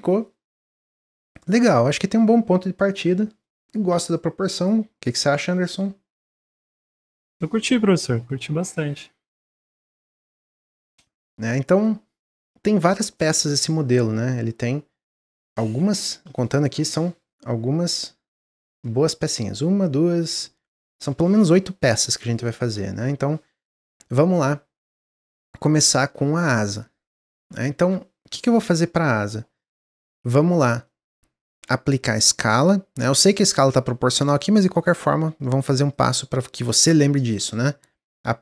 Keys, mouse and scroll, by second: 9.0-9.9 middle drag, 9.9 click, 10.4-13.6 middle drag, 25.2 click, 25.6-26.4 middle drag, 26.4 click, 28.5-30.4 middle drag, 30.4-30.8 scroll up 2, 30.8-33.9 shift+middle drag, 35.9-38.4 drag.